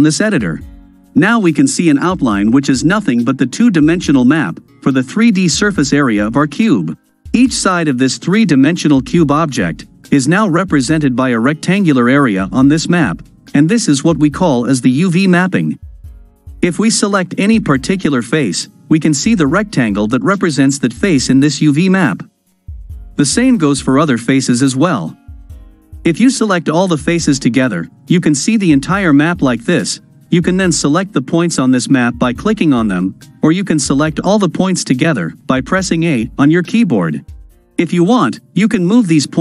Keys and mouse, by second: 15.6 click, 24.2 click, 26.4 a, 34.7 a.